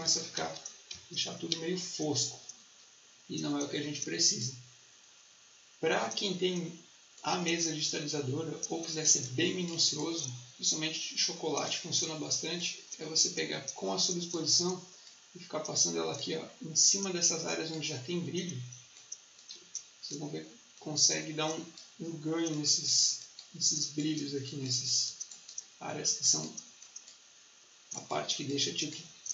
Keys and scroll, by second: 9.0 space, 19.5 space.